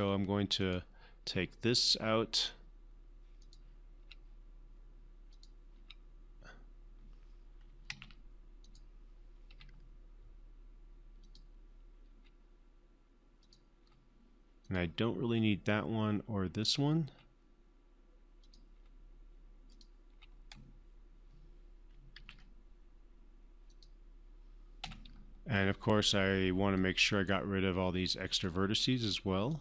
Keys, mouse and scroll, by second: 0.2 Delete, 0.9 click, 1.6 Delete, 2.7 click, 4.4 Delete, 5.7 click, 7.9 Delete, 8.2 ctrl+z, 9.0 click, 9.9 Delete, 11.6 click, 12.4 Delete, 13.9 click, 14.2 Delete, 15.0 click, 15.9 Delete, 17.0 click, 17.5 Delete, 18.8 click, 19.1 Delete, 20.1 click, 20.4 Delete, 22.5 ctrl+z, 24.1 click, 25.2 Delete, 26.1-27.7 right drag, 28.7 click.